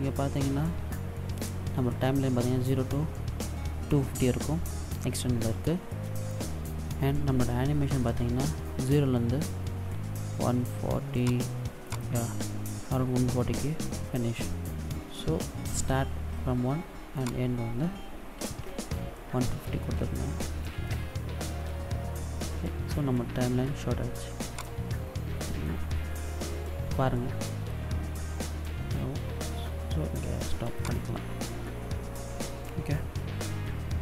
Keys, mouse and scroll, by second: 10.9 click, 11.6 click, 16.8 click, 24.3 click, 30.5 click.